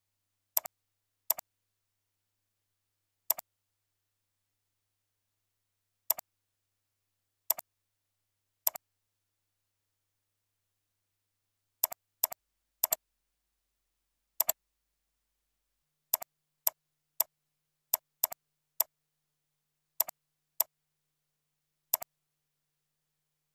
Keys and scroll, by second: 1.5 ctrl+a, 3.9 ctrl+shift+., 17.0 ctrl+c, 17.4 ctrl+a, 17.6 ctrl+v, 18.4 ctrl+a, 19.5 ctrl+b.